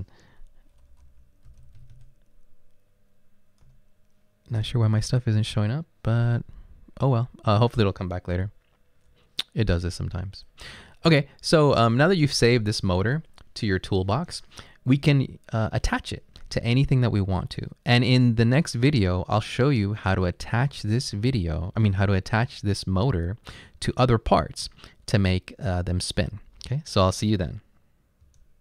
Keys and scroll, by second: 0.7-2.4 typing, 4.7 Return, 8.5 BackSpace, 8.9 BackSpace, 9.0 BackSpace, 9.1 BackSpace.